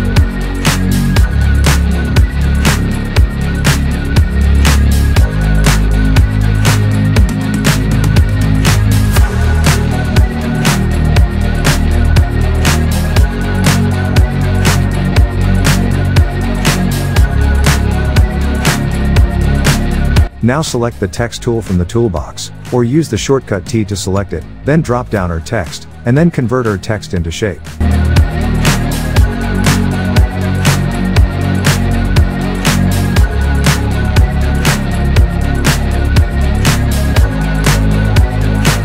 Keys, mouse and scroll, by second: 0.0 ctrl+j, 1.8 ctrl+t, 2.1-3.0 drag, 5.4-6.5 drag, 9.1 ctrl+t, 9.6-12.1 drag, 13.3-14.1 scroll down 1, 14.2 shift+click, 14.8 click, 15.8-17.4 typing, 18.2 click, 20.2 Delete, 22.0 click, 23.0 alt+scroll up 1, 24.0 Caps_Lock, 24.2-31.8 typing, 27.6 Return, 32.1 Left, 33.1 Right, 33.3 BackSpace, 33.8 Return, 34.6 click, 35.5 right click, 37.4 click, 38.5 alt+scroll down 2.